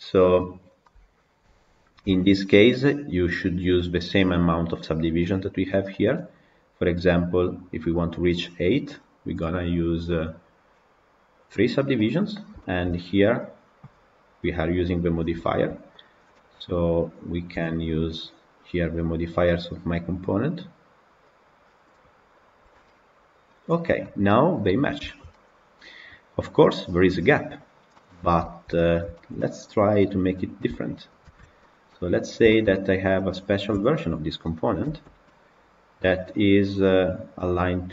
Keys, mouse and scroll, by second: 0.5 scroll down 2, 0.7-1.7 middle drag, 1.7 scroll down 2, 2.0-2.5 shift+middle drag, 2.5 scroll up 2, 3.4 click, 8.1-11.7 drag, 11.7-12.5 scroll down 3, 12.5 shift+middle click, 13.4 click, 15.3 shift+middle click, 15.9 click, 17.4 KP_Decimal, 22.4-23.5 drag, 23.9-24.7 middle drag, 24.7 scroll up 2, 25.0-27.7 shift+middle drag, 27.7-28.3 scroll down 6, 28.3-30.0 shift+middle drag, 30.0 click, 30.6 shift+middle click, 31.1 shift+d, 32.4-33.6 shift+middle drag, 33.6 KP_Decimal, 34.1 scroll down 2, 34.3 middle click, 34.7 Tab, 35.1-37.9 middle drag.